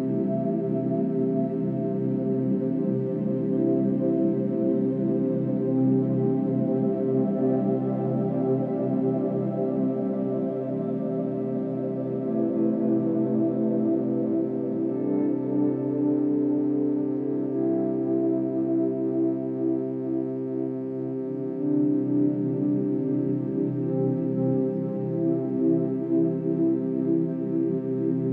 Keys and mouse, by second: 0.1-2.6 drag, 5.1 click, 8.8 0, 10.0-12.7 ctrl+alt+drag, 12.9 click, 14.5 click, 18.0 shift+click, 19.6 shift+click, 20.2 shift+click, 21.1 click, 23.3 click, 23.8 Home, 24.9 click, 26.2-26.5 drag, 27.1 Delete, 27.8-28.3 drag.